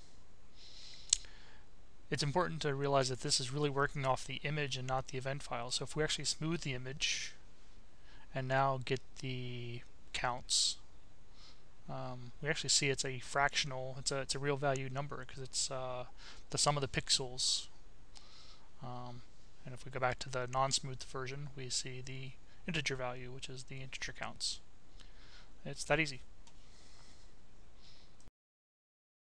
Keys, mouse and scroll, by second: 0.5 click, 2.5 click, 4.3 click, 6.2-7.4 drag, 10.5 click, 12.5 click, 13.8 click, 15.9 click, 17.0 click, 18.2 click, 20.2 click.